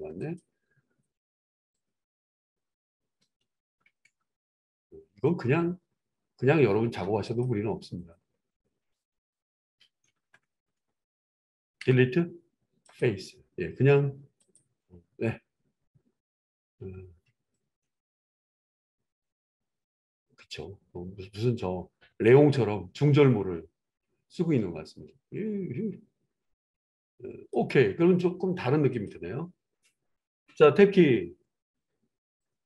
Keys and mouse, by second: 0.1 click, 0.3-1.7 middle drag, 1.7 click, 1.9-7.3 middle drag, 3.2 ctrl+KP_Add, 3.3 ctrl+KP_Add, 3.5 ctrl+KP_Add, 3.7 ctrl+KP_Add, 3.9 ctrl+KP_Add, 4.1 ctrl+KP_Add, 7.3 click, 7.4-8.9 middle drag, 8.9 click, 9.0 middle click, 9.1 click, 9.3-14.3 middle drag, 10.0 ctrl+KP_Add, 10.2 ctrl+KP_Add, 10.4 ctrl+KP_Add, 10.6 ctrl+KP_Add, 10.8 ctrl+KP_Add, 11.7 Delete, 14.3 click, 14.5-17.5 middle drag, 15.0 Tab, 17.5-29.1 drag, 29.1-32.6 middle drag, 30.7 Tab, 31.7 Tab.